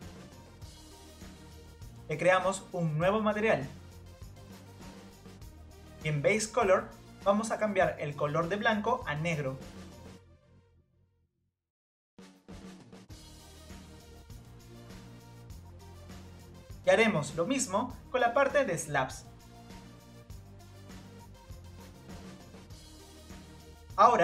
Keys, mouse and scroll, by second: 2.6-4.9 drag, 5.0-7.5 drag, 7.5 scroll up 1, 8.0 middle click, 8.8 click, 9.4 scroll up 1, 10.9-12.4 drag, 13.5 Tab, 13.9 scroll down 2, 14.1-14.9 middle drag, 14.9 scroll down 2, 15.2 scroll up 1, 15.2-16.3 middle drag, 16.3-17.1 scroll up 1, 17.4 Tab, 18.1 scroll up 1, 19.7 click, 19.9 click, 20.0 scroll down 2, 20.0 middle click, 20.3-21.5 drag, 21.8 scroll down 5, 21.9 middle click, 22.1 middle click, 23.0 middle click, 23.1 scroll up 4, 23.1 Tab, 23.3-24.1 middle drag, 24.1 click.